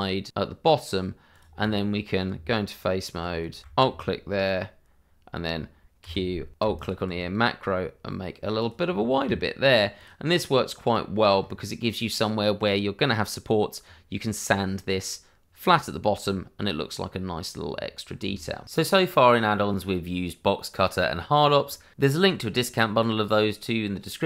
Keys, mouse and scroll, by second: 1.3 click, 2.3 Tab, 3.6 click, 4.2 scroll up 1, 4.5 middle click, 6.0 q, 6.8 click, 8.8-9.2 scroll down 1, 9.2 Tab, 9.7 scroll down 1, 9.9 click, 11.4-13.4 scroll up 1, 15.9-16.2 scroll down 1, 16.2 middle click, 17.6-18.2 scroll down 1, 18.3 shift+scroll down 1.